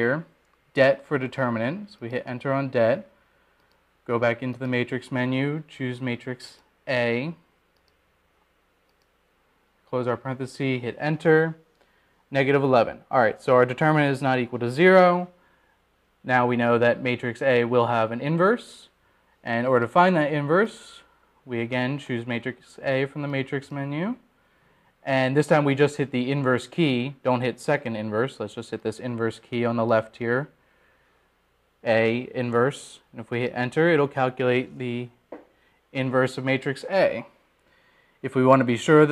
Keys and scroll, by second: 4.7 Return, 9.3 Return, 10.5 ), 11.7 Return, 26.5 Return, 36.3 Return.